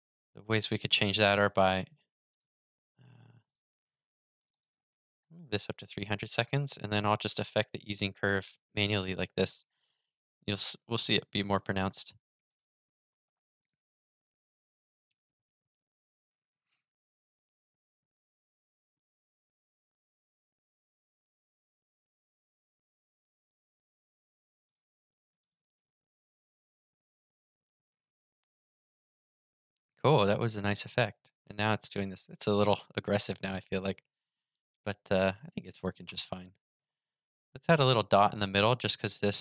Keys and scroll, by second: 25.5 super+r.